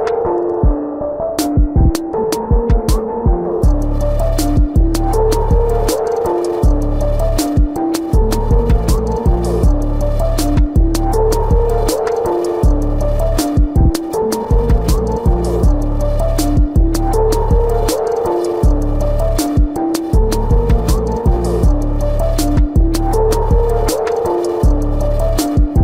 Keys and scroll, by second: 1.5-4.5 typing, 2.4 ctrl+-, 5.9 ctrl+-, 6.2 space, 6.3 ], 6.7 ], 9.2 ], 9.5 space, 11.3-16.0 typing, 17.2 ctrl+alt+z, 20.2 space, 20.7 ctrl+-, 21.1 space, 21.4 ctrl+-, 21.6 ], 21.9 space, 24.0 space, 24.8 ctrl+alt+z, 25.5 space.